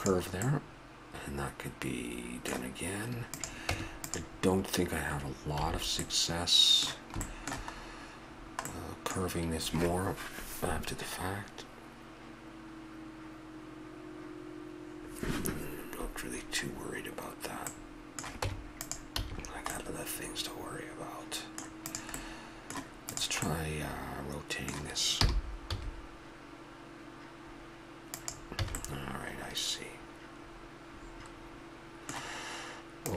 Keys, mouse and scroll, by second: 0.5-1.0 middle drag, 1.4-2.0 middle drag, 2.3-3.3 middle drag, 3.3-4.3 drag, 3.7 Tab, 5.6 a, 6.4 middle click, 7.3-8.7 middle drag, 9.1-10.4 middle drag, 16.6-17.9 middle drag, 18.5 Tab, 19.2 a, 20.4-21.4 middle drag, 21.6-22.3 right drag, 25.2 r, 28.7 a, 29.1-29.8 middle drag, 30.1 middle drag, 30.6 middle click.